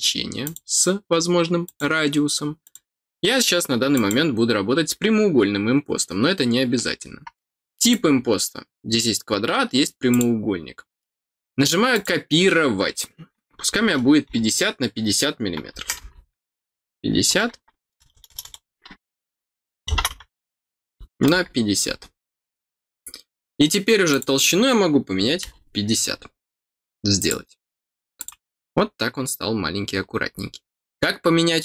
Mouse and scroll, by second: 0.4 click, 1.6 click, 2.6 click, 3.9 click, 7.8 click, 10.1 click, 11.9 click, 24.1 click, 27.1 click, 28.1 click, 30.0-30.7 scroll down 2, 30.9 middle click.